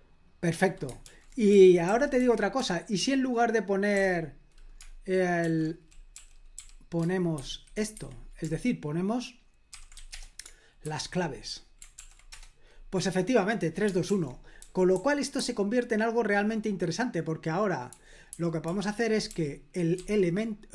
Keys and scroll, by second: 1.0 super+l, 1.5-2.6 typing, 3.9 f, 5.4-7.3 typing, 7.9 Escape, 9.5-10.2 typing, 10.8 super+h, 12.0 ctrl+p, 12.3 Return, 14.1 super+l, 14.6-16.2 typing, 17.7-19.9 typing.